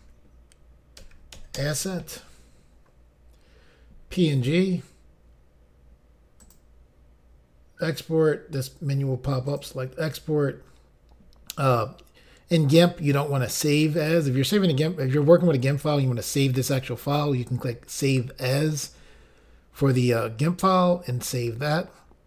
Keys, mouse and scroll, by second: 0.0-1.6 typing, 6.5 click, 9.7 click.